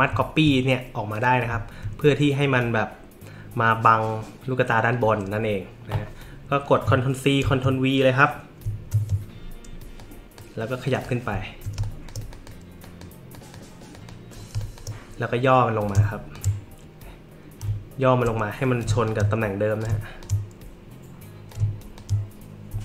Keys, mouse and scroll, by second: 0.2 alt+middle click, 1.1 click, 7.4 ctrl+c, 8.6 ctrl+v, 10.0-10.3 drag, 10.8 drag, 11.4 alt+scroll up 2, 11.7 space, 11.8 click, 12.3 drag, 12.8 drag, 13.3 click, 13.9 click, 14.5 space, 14.6 click, 15.8 shift+click, 17.8-18.2 alt+scroll up 4, 18.8 click, 19.8 shift+click, 21.5 shift+click.